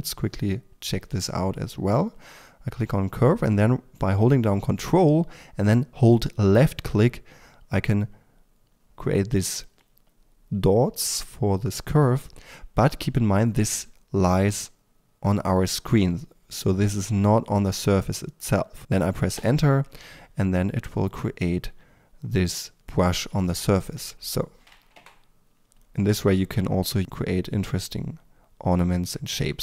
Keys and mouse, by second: 6.5-19.6 drag, 19.6 Return, 21.8-24.1 drag, 25.1 Return, 25.1-27.2 drag.